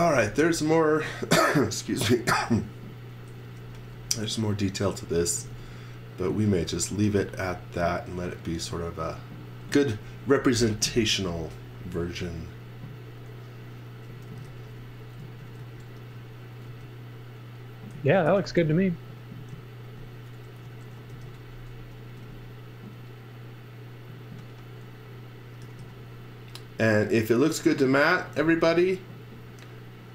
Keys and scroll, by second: 0.0 v, 5.0-7.2 typing, 14.0-16.6 typing, 17.7-18.9 typing, 20.4 shift+h, 21.1 space, 22.1 space, 25.4-26.3 typing, 27.9-28.9 typing.